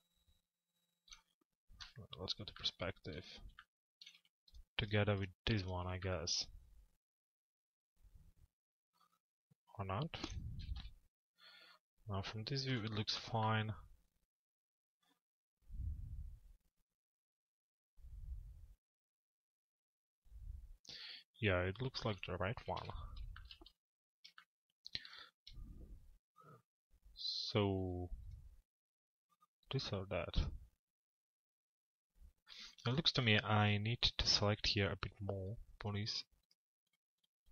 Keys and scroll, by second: 1.4 p, 10.6 t, 11.3 z, 22.2 t.